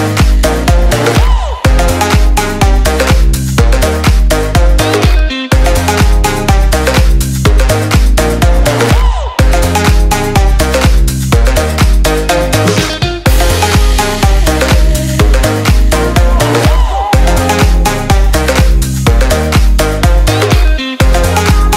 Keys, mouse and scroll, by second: 0.1 Delete, 0.3 click, 1.5 ctrl+s, 2.1 click, 3.8 click, 4.5 Delete, 4.7 click, 5.2 s, 5.8 click, 8.4 Delete, 9.2 z, 9.7 click, 11.1 ctrl+t, 11.4 click, 13.4 Return, 13.7 click, 16.1 ctrl+s, 16.7 click, 21.3 ctrl+s.